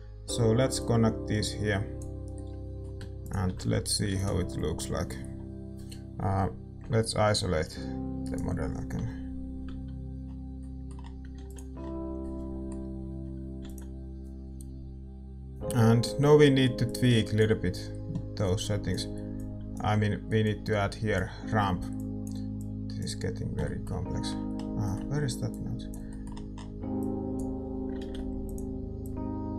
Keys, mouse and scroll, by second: 3.2-5.8 drag, 5.7 ctrl+s, 8.8 KP_Divide, 8.8-10.2 right drag, 10.2-10.5 scroll up 1, 10.5-15.0 middle drag, 11.8 ctrl+s, 15.0 ctrl+s, 15.0-16.8 scroll up 1, 16.8-18.5 scroll up 1, 18.5-20.4 scroll up 1, 20.4-21.1 scroll up 1, 21.1-21.9 scroll up 1, 21.9-22.5 scroll up 1, 22.5-29.5 drag, 27.0 middle click, 27.2-28.4 right drag, 28.4 ctrl+z.